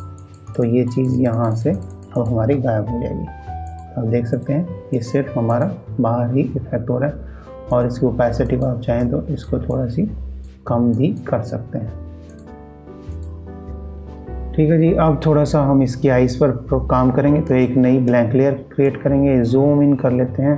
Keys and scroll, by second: 18.0 ctrl+alt+shift+e, 18.1 ctrl+space.